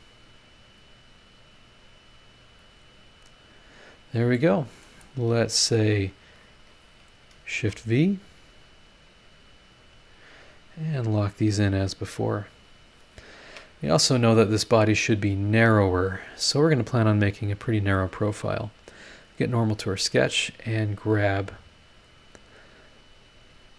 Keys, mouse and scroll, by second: 0.8 click, 2.6 click, 4.3 middle click, 5.7 click, 7.5 shift+v, 8.8 click, 10.1 click, 10.4 middle click, 11.6 click, 12.6 click, 13.5 Escape, 19.3 click, 20.0 scroll up 1, 21.9 click, 23.6 click.